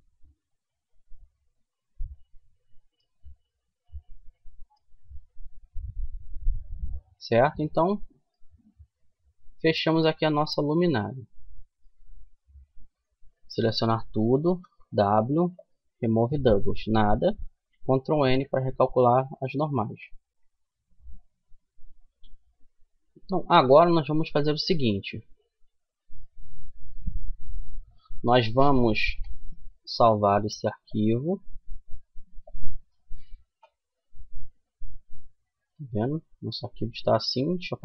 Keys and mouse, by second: 0.4 middle click, 1.3-3.1 middle drag, 3.2 middle click, 5.1 ctrl+z, 9.0 middle click, 9.5 Tab, 11.7 Tab, 12.3 a, 12.7 a, 13.8 w, 17.4 ctrl+n, 18.2 a, 21.3-23.8 middle drag, 29.4 middle click, 30.2-32.1 drag, 32.3-33.5 middle drag, 35.3 middle click.